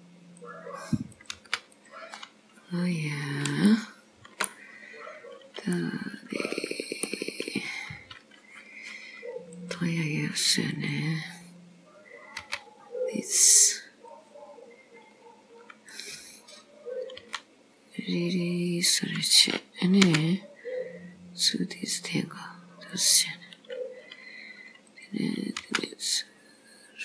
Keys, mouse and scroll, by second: 1.2 click, 1.4 g, 2.2 scroll up 3, 3.7 shift+middle click, 5.8 middle click, 7.4-8.6 scroll down 3, 9.6 click, 10.8 click, 12.5 b, 17.2 s, 20.1 g, 25.0 click, 25.7 g.